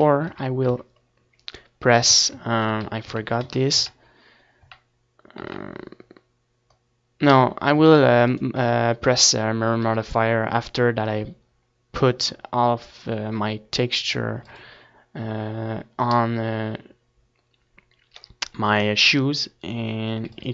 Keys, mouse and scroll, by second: 0.0 z, 0.5 ctrl+z, 0.9 ctrl+z, 1.3 ctrl+z, 1.7 ctrl+z, 2.5 ctrl+z, 3.4 ctrl+z, 5.4-6.9 middle drag, 5.8 a, 6.0 ctrl+s, 12.6 ctrl+s, 15.2-16.4 middle drag, 17.2-20.5 middle drag, 18.8 ctrl+s.